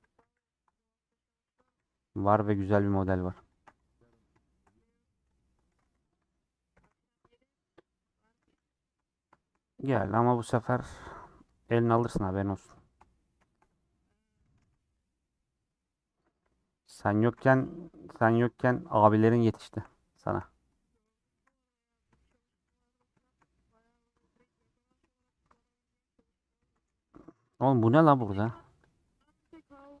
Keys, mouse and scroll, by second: 0.0 a, 0.3 m, 0.6 middle click, 1.6 click, 1.7 g, 2.9 1, 3.0 click, 3.7 g, 4.4 shift+middle click, 5.4 click, 5.8 g, 6.5 click, 6.8 g, 7.8 click, 8.3 a, 8.6 m, 8.9 middle click, 9.7 scroll up 1, 9.8 middle click, 10.8-11.6 scroll up 1, 11.6 click, 12.3 scroll down 2, 12.5 middle click, 12.7 scroll up 1, 12.9 shift+middle click, 13.2-13.8 scroll up 4, 13.5 shift+middle click, 13.9 2, 14.5 click, 14.6 ctrl+x, 14.8-16.2 middle drag, 16.2-17.0 scroll up 1, 17.0 click, 17.4 ctrl+x, 18.2 click, 18.3 ctrl+x, 18.5 scroll down 3, 18.7-19.9 shift+middle drag, 19.9-20.2 scroll up 4, 20.2 shift+middle click, 21.2 click, 21.4 ctrl+x, 21.6 scroll down 3, 21.7 middle click, 22.4 a, 23.2 shift+middle click, 23.7 scroll up 2, 24.1 middle click, 24.6-25.0 scroll up 1, 25.0 1, 25.2 click, 25.5 alt+z, 26.6 alt+z, 26.8 scroll down 4, 26.9 middle click, 27.2 3, 27.4-28.4 drag, 28.4 l, 29.0 middle click, 29.2 scroll up 2, 29.9 click.